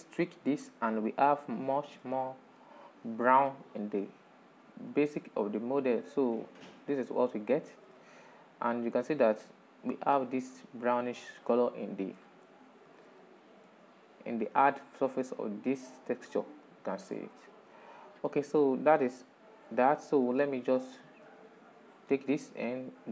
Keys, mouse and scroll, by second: 0.0-1.4 drag, 1.3 middle click, 1.4-4.0 middle drag, 4.0 scroll down 4, 4.6 middle click, 5.4 scroll up 3, 5.9-9.9 middle drag, 9.9 scroll up 1, 11.3-12.9 middle drag, 12.9 ctrl+shift+click, 15.1-19.5 middle drag, 19.5 ctrl+shift+click, 20.3-22.4 middle drag, 22.4-23.1 drag.